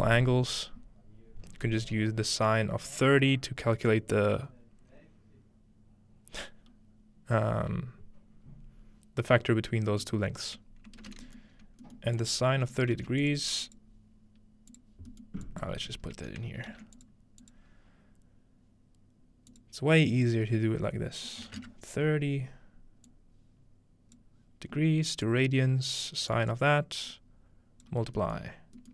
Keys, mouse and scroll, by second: 1.2-3.0 scroll down 1, 9.9-11.6 middle drag, 10.7-11.8 scroll up 1, 12.2-13.4 drag, 13.0 shift+d, 16.7 shift+d, 17.0-19.2 drag, 19.5-21.4 drag, 23.1-24.2 drag, 25.3-26.5 drag, 27.1-27.9 drag, 28.8 click.